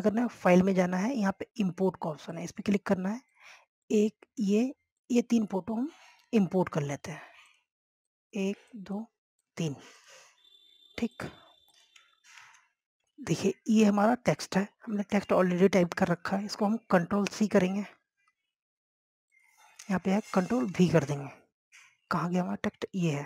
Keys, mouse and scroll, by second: 5.5 ctrl+click, 6.1 ctrl+click, 8.6 click, 11.5 scroll down 1, 11.9 scroll up 1, 12.2 click, 13.0 Tab, 13.3 click, 20.4 click, 21.8 ctrl+v, 22.8-23.2 scroll down 1.